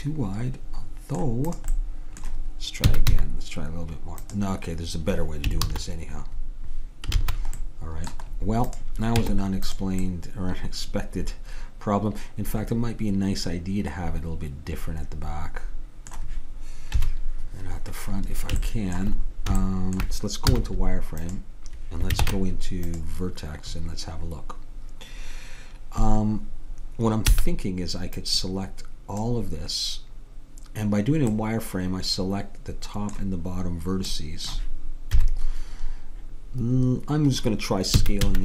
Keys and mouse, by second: 1.5-3.5 drag, 1.8-2.9 middle drag, 2.9 s, 5.7 ctrl+z, 7.2 ctrl+z, 7.7-8.8 middle drag, 8.8 click, 9.3 Tab, 17.0 KP_7, 20.5 z, 22.3 ctrl+Tab, 27.4 b, 31.4-33.2 middle drag, 34.3 middle click, 35.2 KP_7, 38.0 s.